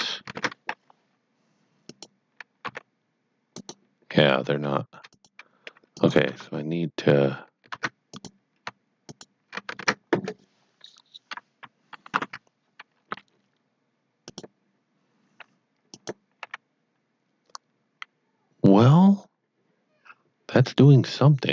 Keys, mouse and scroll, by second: 0.3 ctrl+Tab, 1.8 click, 2.6 g, 3.5 right click, 5.0 click, 6.0 click, 6.2 Tab, 7.2 Tab, 8.1 click, 9.0 shift+click, 14.2 shift+click, 16.4 shift+r.